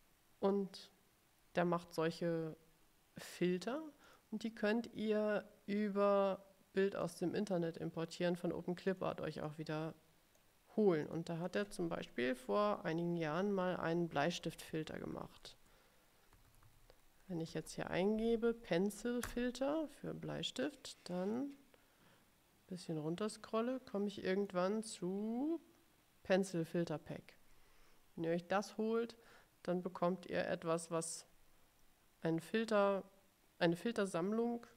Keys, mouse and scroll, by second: 4.1 click, 7.1 click, 9.5-10.7 drag, 11.1 click, 11.6 click, 13.5-18.2 typing, 19.3 Return, 21.4-24.8 drag, 25.2-25.7 scroll down 1.